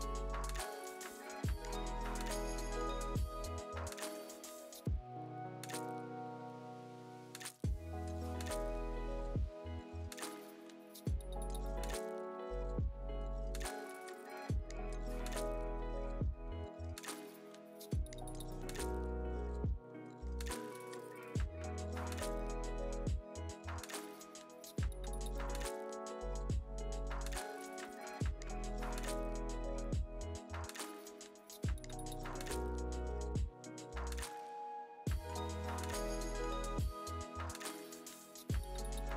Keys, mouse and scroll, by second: 0.0 click, 0.4 click, 0.7 alt+middle click, 1.2 alt+middle click, 1.7 middle click, 2.7 click, 3.0 click, 3.3 alt+middle click, 3.5 click, 3.7 F3, 3.9 click, 4.2 click, 4.5 click, 4.7 alt+middle click, 5.1 click, 5.5 click, 5.8 click, 6.1 shift+click, 6.8 alt+right click, 7.1 click, 7.2 right click, 7.4 shift+click, 8.1 click, 8.4 alt+middle click, 8.9 x, 9.0 F3, 9.8 `, 10.0 click, 10.4 click, 10.6 click, 11.6 click, 12.0 click, 12.8 click, 13.3 click, 13.5 click, 13.9 click, 14.5 click, 15.2 alt+1, 15.6 click, 15.7 right click, 15.9 1, 16.0 click, 16.5 click, 16.9 click, 17.4 click, 18.3 click, 18.6 click, 18.9 click, 19.1 click, 19.5 r, 19.8 F3, 20.0 alt+middle click, 20.4 alt+middle click, 20.6 middle click, 20.8 click, 21.1 alt+middle click, 21.3 click, 21.7 alt+middle click, 22.0 click, 22.2 click, 22.6 alt+middle click, 22.9 alt+scroll down 2, 23.2 alt+`, 23.6 scroll up 1, 23.8 alt+scroll down 1, 24.3 scroll up 1, 24.7 right click, 25.3 r, 26.6 F3, 27.1 F3, 29.0 alt+middle click, 29.3 middle click, 29.5 click, 30.1 click, 30.4 click, 30.7 middle click, 31.1 click, 31.2 click, 31.6 click, 31.8 click, 31.9 click, 32.0 click, 33.0 click, 33.5 alt+1, 34.5 F3, 35.4 F3, 35.5 t, 36.8 click, 37.1 click, 37.6 click, 38.2 alt+`, 38.2 right click, 38.4 scroll, 38.6 click, 39.0 click.